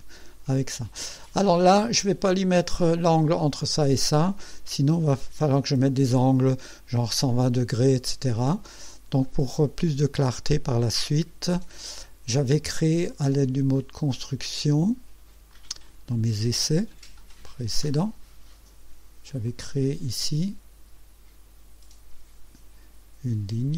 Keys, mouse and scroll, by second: 1.3-2.0 right drag, 9.2 scroll up 1, 9.6-10.4 right drag, 13.8 click, 15.5 click, 19.5 click.